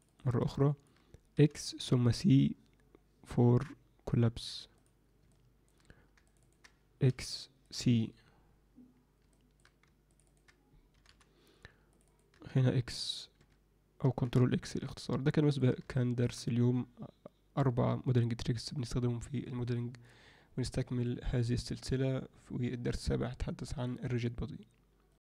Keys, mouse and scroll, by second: 0.0 ctrl+click, 0.6 alt+middle click, 1.3 x, 5.3 alt+middle click, 6.3 ctrl+click, 6.4 ctrl+click, 7.0 x, 9.3 middle click, 10.0 ctrl+click, 10.2 ctrl+click, 10.9 x, 11.9 click, 12.0 click, 12.3 x, 14.2 ctrl+x, 14.8 alt+middle click, 15.9 alt+shift+middle click.